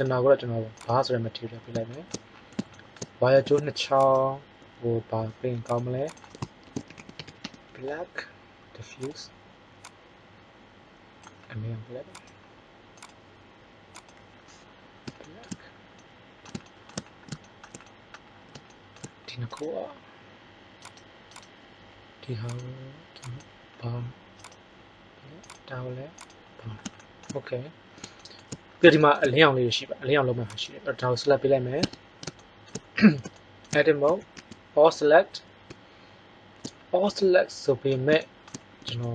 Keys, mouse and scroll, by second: 1.4-1.9 middle drag, 4.2-5.5 right drag, 5.8-11.0 drag, 12.2-14.3 right drag, 12.9-14.0 drag, 31.8 Tab, 34.0 a, 34.3 a, 37.8-39.1 middle drag.